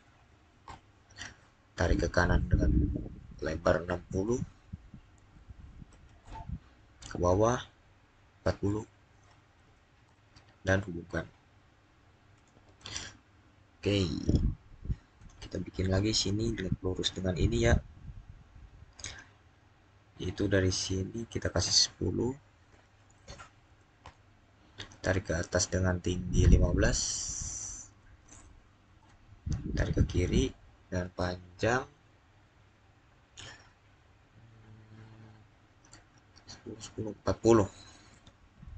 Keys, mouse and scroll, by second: 0.0-0.5 typing, 5.0-6.1 typing, 8.7 Return, 9.2-10.0 typing, 12.2 Return, 15.0 click, 15.9 scroll up 1, 22.6 scroll up 1, 22.6-23.5 typing, 23.9 Return, 27.1-27.7 typing, 28.8 Return, 38.0-38.5 typing.